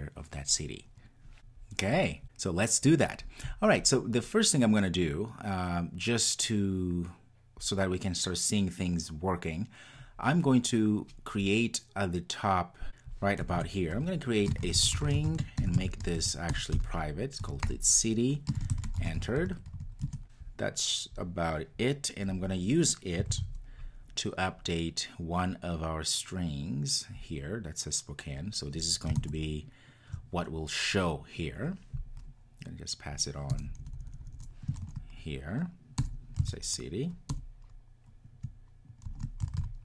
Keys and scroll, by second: 23.3 super+c.